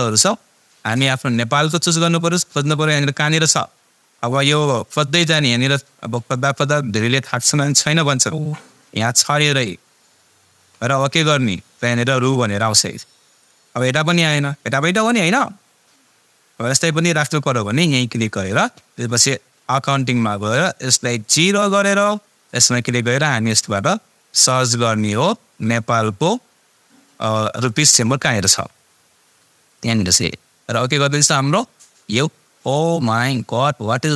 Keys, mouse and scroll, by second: 3.4-9.1 scroll down 1, 9.3 click, 9.3-15.1 drag, 17.6-21.5 drag, 25.5-26.0 scroll up 1, 29.0-30.2 scroll up 1, 30.2 click.